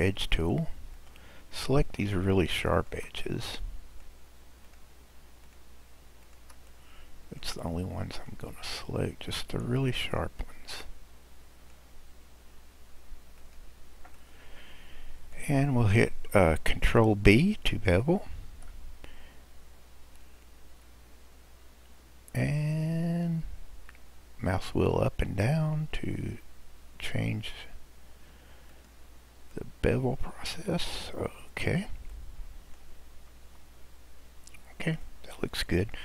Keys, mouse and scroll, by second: 0.9 click, 2.8 shift+click, 3.2-4.6 middle drag, 4.6 shift+click, 5.5 shift+click, 6.2 shift+click, 6.7-8.2 middle drag, 8.2 shift+click, 9.2 shift+click, 9.9-13.1 middle drag, 13.4 shift+click, 14.1-17.3 middle drag, 18.5 ctrl+b, 29.6-33.5 middle drag, 33.5 Tab, 34.1-35.0 scroll down 2, 35.0-36.0 middle drag.